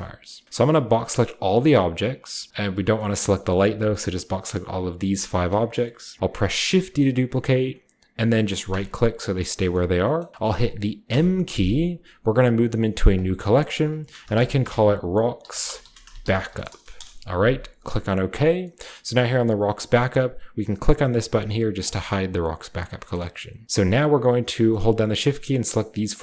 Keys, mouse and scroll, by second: 0.5-2.9 shift+drag, 2.4-3.2 scroll down 1, 2.4 a, 3.1 middle click, 3.2-4.6 scroll up 1, 3.6 b, 3.9-6.2 drag, 4.6-5.1 scroll up 1, 4.9 g, 5.2 middle click, 6.7 typing, 8.6-10.0 drag, 11.0 typing, 13.1-14.1 drag, 14.2-17.4 typing, 18.2-20.4 drag, 21.8-24.9 drag, 23.1-23.6 middle drag, 23.9-26.0 scroll up 1, 24.3-26.2 right drag.